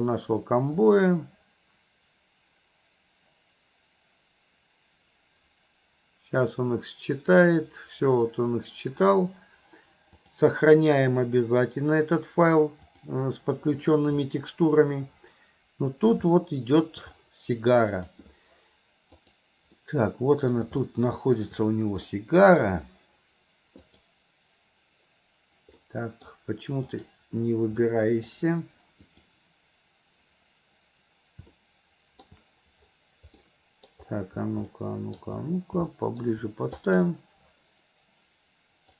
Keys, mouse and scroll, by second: 10.3-13.9 drag, 16.4-16.9 middle drag, 17.9 click, 19.3 click, 19.8-20.6 middle drag, 20.8 middle click, 22.2 middle click, 23.8 click, 25.9 middle click, 26.9 click, 27.8-28.3 middle drag, 29.1 click, 31.6-32.3 middle drag, 33.5-34.0 middle drag, 34.8-35.3 middle drag, 36.0-36.3 middle drag, 36.8 click.